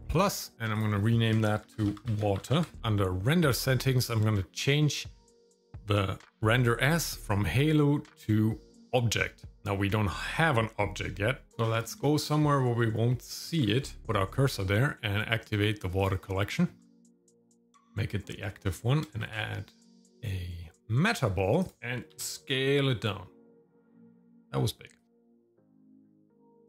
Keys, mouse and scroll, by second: 0.0 click, 0.7-2.6 drag, 3.4 click, 4.1-6.5 scroll down 3, 7.0-8.9 drag, 11.5 shift+middle click, 11.5 scroll down 2, 11.7 scroll down 1, 12.0 shift+middle click, 12.5 scroll down 1, 12.8 middle click, 13.4 shift+middle click, 13.8 middle click, 14.0 shift+right click, 14.0 scroll up 1, 16.0 click, 16.8-17.6 scroll up 2, 17.6 middle click, 18.5 middle click, 19.2 shift+a, 22.1 s, 25.1 scroll down 2, 25.4 scroll up 2, 25.7 middle click, 25.8 scroll down 2, 25.9 shift+middle click, 26.1-26.6 scroll up 3, 26.2 middle click, 26.5 shift+middle click.